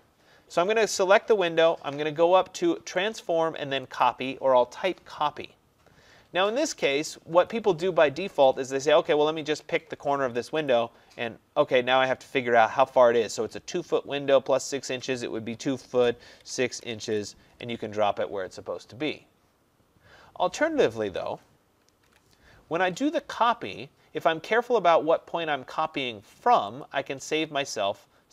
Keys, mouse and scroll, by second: 1.4 click, 3.2 click, 4.1 click, 10.7 click, 15.6-17.5 typing, 21.1 Escape, 22.1 ctrl+z, 26.9 click.